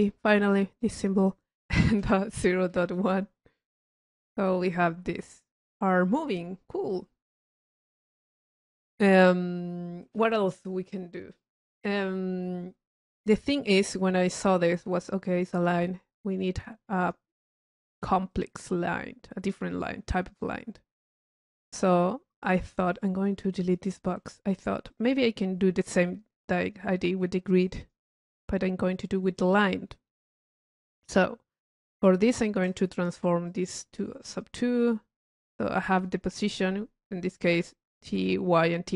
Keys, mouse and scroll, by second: 4.8 click, 8.4 click, 10.0 middle click, 10.1-11.7 middle drag, 14.1 click, 15.0-17.3 right drag, 17.9 click, 17.9 right click, 18.3 middle click, 19.2-20.4 drag, 21.7 click, 23.0 click, 23.4-24.5 drag, 24.9 click, 27.7 click, 28.9 click, 33.5 click, 34.3 click, 35.5 click.